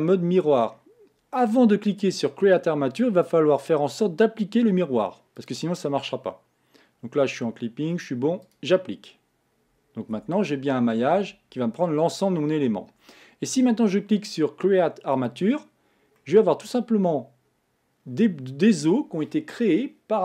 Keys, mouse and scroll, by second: 5.4 click, 8.4-10.2 drag, 10.2 Tab, 11.2 Tab, 15.1 click, 16.2-19.2 middle drag.